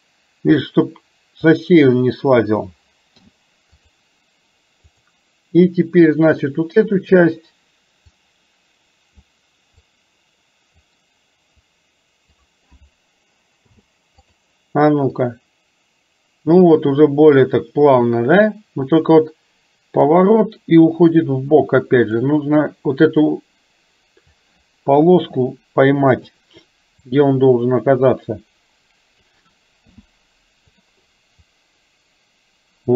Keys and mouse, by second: 1.6 click, 3.2 i, 5.0 click, 8.2-9.4 drag, 9.9 click, 11.7 click, 13.6 |, 15.4-22.2 drag, 23.4 click, 25.2 r, 27.1-29.4 drag, 30.0 i, 31.5-32.9 drag.